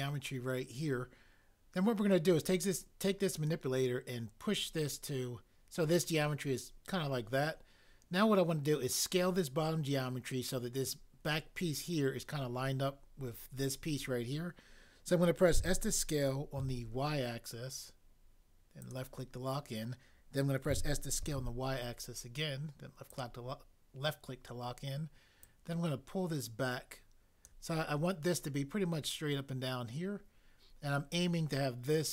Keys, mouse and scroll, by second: 15.6 s, 16.6 y, 20.7 s, 21.4 y.